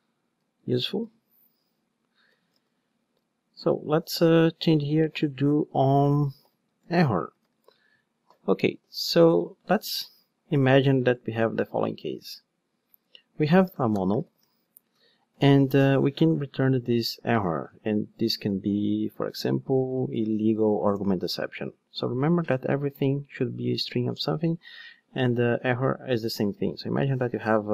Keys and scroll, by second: 0.9 super+x, 10.0 super+x, 14.7 Return, 20.9 Return.